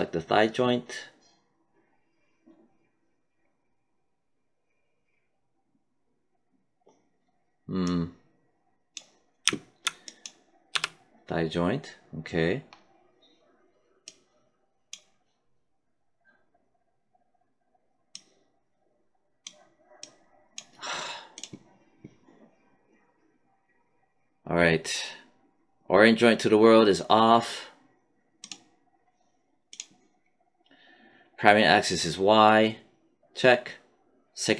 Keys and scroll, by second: 10.6 w.